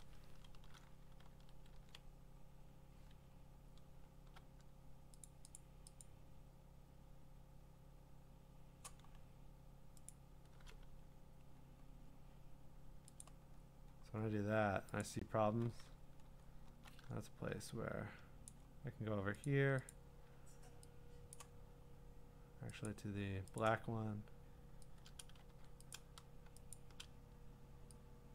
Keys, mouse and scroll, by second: 1.7 ctrl+d, 2.0-2.3 scroll down 1, 3.2 scroll down 5, 3.7 scroll up 4, 5.4 click, 5.6 click, 6.1 click, 6.8 scroll, 9.2-10.1 scroll, 10.1 click, 12.2 scroll, 13.2 click, 13.6-15.0 scroll, 15.0 click, 15.5 b, 15.7-16.6 scroll, 18.5 click, 19.4 click, 19.9 click, 21.3 click, 21.8-22.9 scroll, 22.9 click, 23.6 click, 25.2 click, 25.5 x, 25.9 click, 26.7 shift+click.